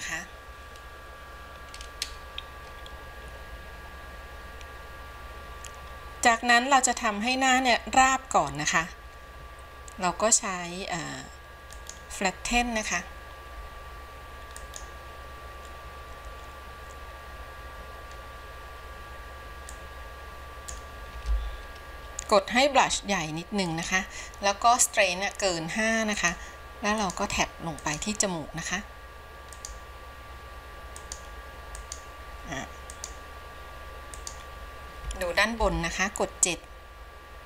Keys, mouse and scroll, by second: 13.2 click, 14.9-19.8 drag, 19.9-23.1 drag, 23.1 f, 26.5-35.8 drag, 35.8 KP_7.